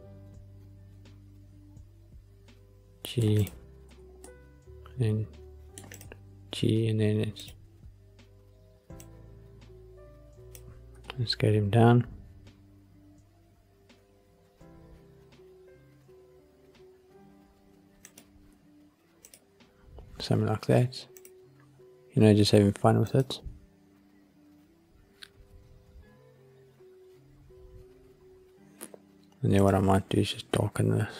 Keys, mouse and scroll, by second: 3.3 click, 3.8 g, 4.2 middle click, 5.9 click, 7.3 click, 8.9 click, 10.9 5, 18.0 click, 19.1 click, 21.1 click, 24.4 click, 29.5 click.